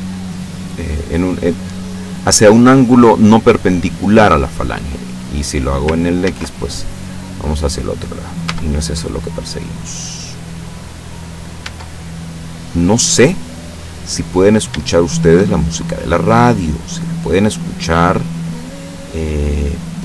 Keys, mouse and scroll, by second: 4.7-5.9 drag, 6.3 ctrl+z, 7.5-8.7 middle drag, 8.5 Tab, 9.1-10.0 scroll down 1, 10.0-10.5 scroll up 1, 10.9 scroll up 1, 11.7 Tab, 12.9-14.0 middle drag, 14.5 shift+right click, 14.9 shift+right click, 15.7 shift+middle click, 16.9 scroll up 1, 17.0-18.4 middle drag, 18.4 scroll up 2, 19.2 middle click, 19.3 scroll up 1, 19.4 middle click, 19.7-20.0 scroll down 1.